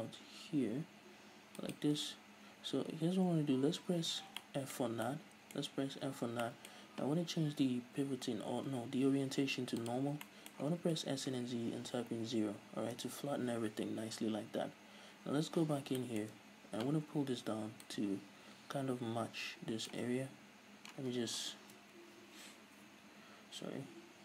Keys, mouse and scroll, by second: 1.7-2.7 shift+drag, 2.7-4.0 scroll up 2, 4.0 scroll up 1, 4.1 z, 4.4-9.5 middle drag, 4.9 scroll down 2, 5.7-6.1 scroll up 2, 6.1 f, 8.0 ,, 10.3 middle click, 10.7 s, 13.1 Return, 14.5 KP_1, 15.3-15.6 scroll up 2, 15.6 z, 15.9-17.8 shift+middle drag, 16.3-17.3 scroll up 3, 17.3-17.8 scroll up 1, 17.8-24.2 drag, 20.2-21.2 scroll up 2.